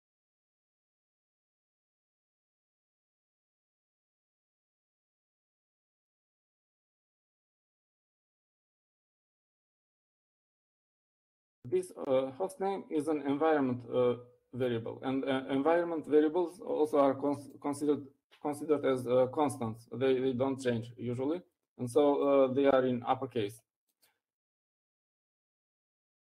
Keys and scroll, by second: 4.0-11.0 typing.